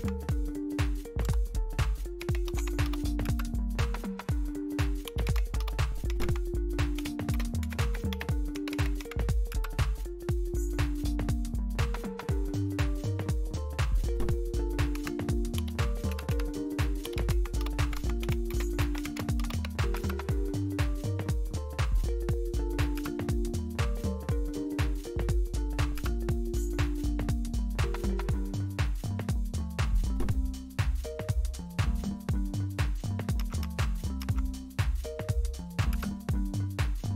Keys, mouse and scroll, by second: 0.0-0.4 typing, 1.2 Tab, 1.9-9.5 typing, 10.3-12.6 scroll up 1, 12.6-14.9 scroll up 1, 14.9-20.1 typing, 22.9 Return, 25.9 Return, 33.3 Up, 33.6 Up, 34.2 Up, 35.9 Return.